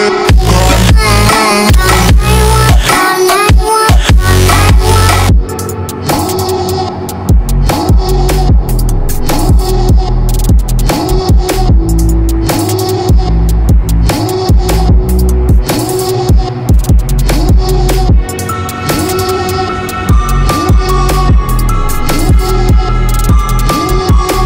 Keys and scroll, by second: 0.0-0.1 typing, 3.5-4.5 typing, 5.7-6.6 typing, 15.7-17.5 typing, 17.6 Return.